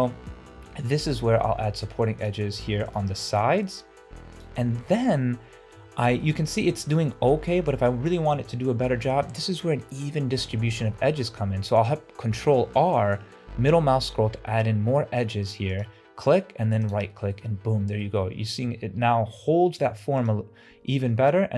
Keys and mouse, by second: 0.8 ctrl+r, 2.7 ctrl+r, 6.3 middle click, 6.8 shift+middle click, 10.6 ctrl+r, 17.4 middle click, 18.5 shift+middle click, 19.8 ctrl+r.